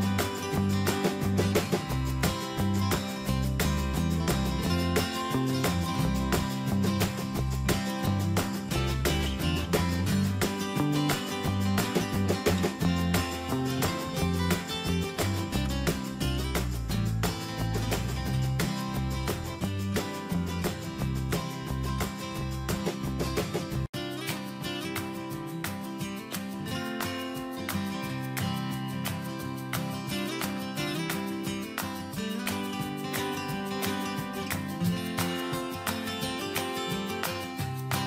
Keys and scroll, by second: 13.3 alt+Right, 16.3 ctrl+z, 21.3 alt+Right, 24.0 Up, 32.8 ctrl+z.